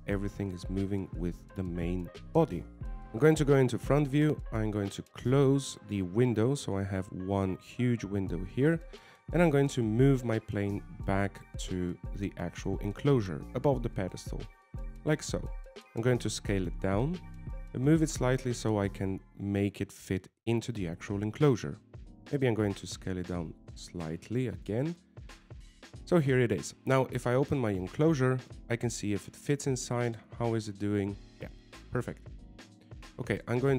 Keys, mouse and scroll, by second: 0.2 g, 3.0 KP_1, 4.8 middle click, 6.6 KP_1, 8.7 click, 10.7 scroll down 6, 11.3 shift+middle click, 11.8 scroll up 4, 12.3 shift+middle click, 12.6-13.1 scroll up 6, 13.7 g, 16.4 s, 19.8 g, 24.4 s, 26.5 g, 28.7 middle click, 30.8 click, 31.3 middle click, 32.1 z, 32.4 middle click.